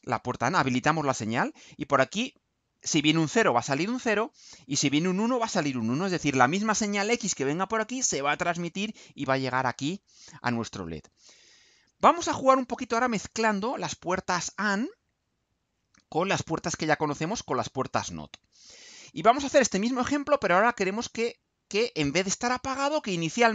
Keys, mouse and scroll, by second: 12.9 click, 16.7 click.